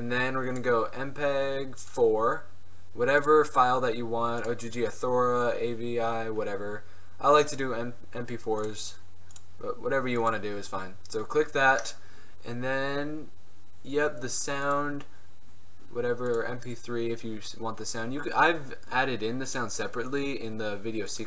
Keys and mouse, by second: 0.7-17.5 drag, 17.5-19.6 middle drag, 19.6-21.2 drag.